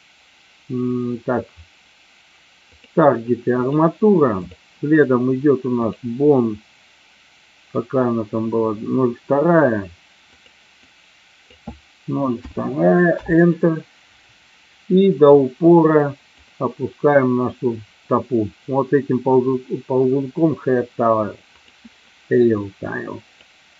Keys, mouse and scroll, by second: 2.8 click, 4.6-6.0 drag, 10.4-14.1 drag, 15.5 click, 21.7-23.7 drag.